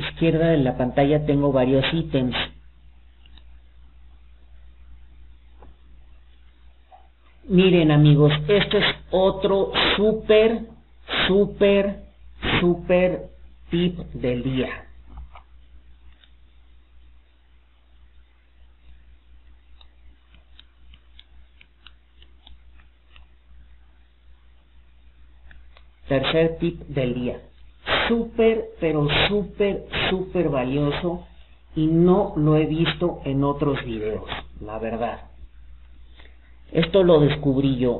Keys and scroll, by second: 6.5 alt+d, 25.5 Escape.